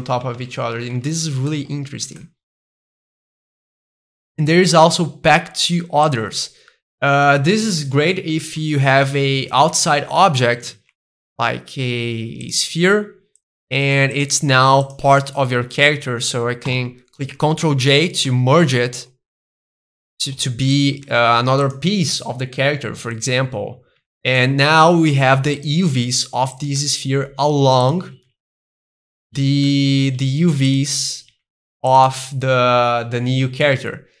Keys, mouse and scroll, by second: 0.5 ctrl+z, 1.3-3.6 middle drag, 1.3 scroll down 2, 3.7-5.5 drag, 6.0-7.2 drag, 7.2-9.3 middle drag, 9.4 Tab, 10.1 middle click, 10.1 scroll up 2, 10.4 a, 12.4 click, 12.4 a, 12.9 g, 13.3 click, 13.7 g, 14.1 click, 14.8 shift+click, 15.2 middle click, 16.7 ctrl+j, 17.7 middle click, 17.7 Tab, 18.3-19.3 middle drag, 19.3 g, 19.9 click, 20.0 middle click, 20.4 g, 20.7 click, 20.9 s, 21.6 click, 22.5 middle click, 23.3 Tab, 24.3 middle click, 24.9 g, 25.6 click, 25.9 s, 26.5 click, 26.8 middle click, 27.1 g, 27.8 click, 28.1 s, 29.1-30.2 drag, 30.2 g, 30.7 click, 31.3 s, 31.9 click, 32.1-34.2 middle drag.